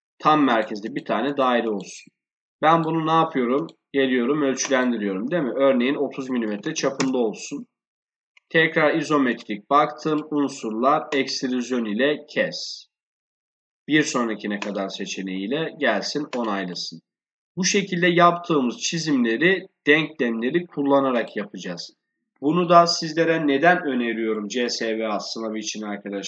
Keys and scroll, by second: 7.6 Return.